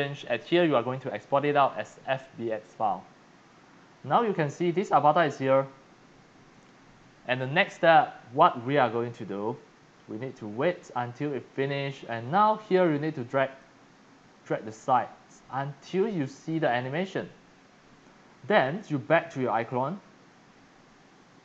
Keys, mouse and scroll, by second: 0.9-1.4 drag, 3.8-4.5 scroll up 4, 4.7 click, 4.9 right click, 10.8-11.4 scroll up 3, 13.5 click, 15.4 click, 15.6 click, 15.8 click, 15.8 scroll, 16.0 click.